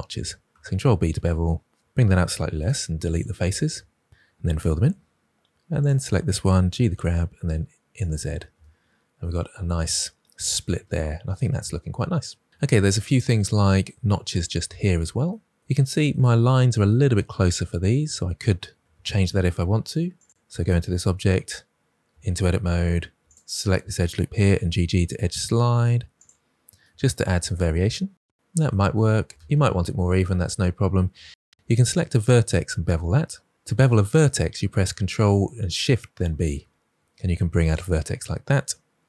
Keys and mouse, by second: 2.5 Delete, 4.1 2, 4.6 f, 4.7 f, 6.2 g, 6.4 z, 7.3 click, 7.8 Tab, 12.8-13.1 middle drag, 19.8 2, 21.0 2, 22.0 Tab, 24.3 g, 24.5 g, 26.1 click, 27.4 Tab, 30.0 ctrl+z, 30.4 ctrl+z, 31.3 1, 31.8 click, 36.2 ctrl+b, 37.6-39.0 drag.